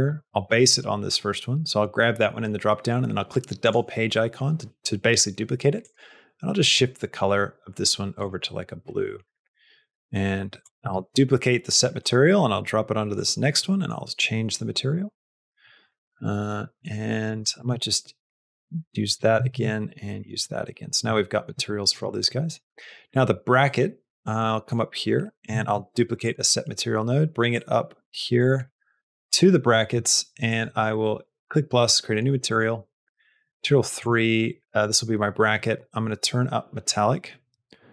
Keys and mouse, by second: 0.0 click, 5.7 click, 10.6 click, 10.8 shift+d, 12.4 click, 13.5 middle click, 14.8 click, 15.3 middle click, 15.9 middle click, 16.6 middle click, 17.2 click, 17.5 shift+d, 18.5 middle click, 19.1 click, 19.4 shift+d, 20.3 middle click, 21.0 middle click, 21.5 shift+middle click, 22.2 middle click, 23.6 middle click, 24.3 middle click, 25.3 click, 25.5 shift+d, 26.5 middle click, 27.4 click, 28.7 click, 31.2 click, 34.0 click, 36.2 click.